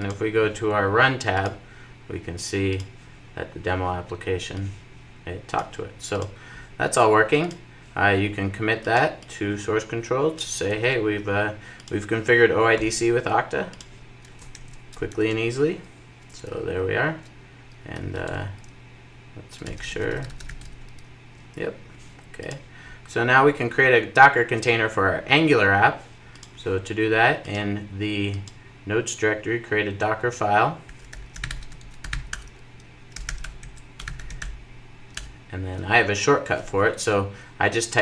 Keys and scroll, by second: 35.0 Return.